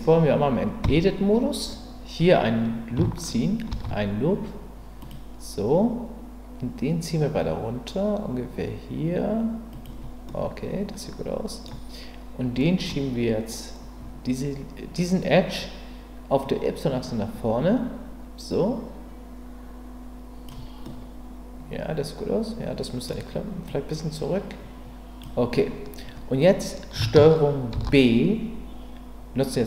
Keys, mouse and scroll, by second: 0.8 Tab, 3.7 ctrl+r, 9.7 click, 10.3-11.7 middle drag, 12.6 middle click, 16.4-20.4 drag, 20.8-21.5 scroll up 1, 21.5-23.1 scroll up 1, 23.1 middle click, 23.6-25.2 drag, 27.7 ctrl+b.